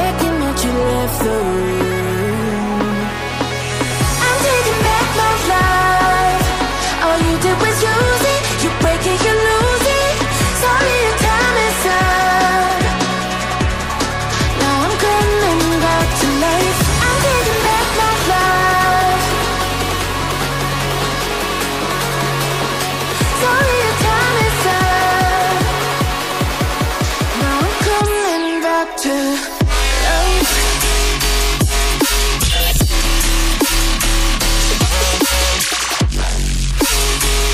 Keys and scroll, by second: 14.0 ctrl+d, 21.8 ctrl+d.